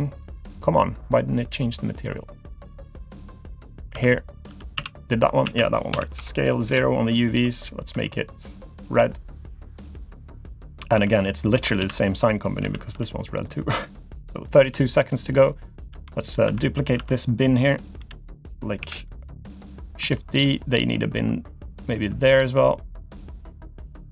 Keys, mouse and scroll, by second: 2.8 click, 3.6 click, 3.9 Tab, 4.1 click, 4.5 Tab, 4.8 a, 5.4 a, 5.9 s, 7.9 g, 10.7 click, 11.0 Tab, 11.1 click, 11.5 Tab, 11.8 a, 12.6 a, 12.9 g, 14.6 Tab, 15.0 click, 15.3 middle click, 15.7-16.5 scroll down 2, 15.9 Tab, 16.5 Tab, 16.6 click, 17.1 click, 18.0 l, 18.8 KP_7, 20.0 shift+d.